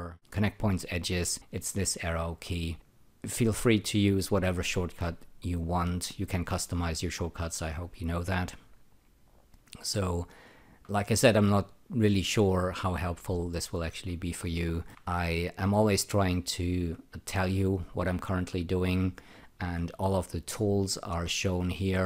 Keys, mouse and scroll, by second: 0.9 <, 10.8 alt+middle click, 14.8 alt+middle click.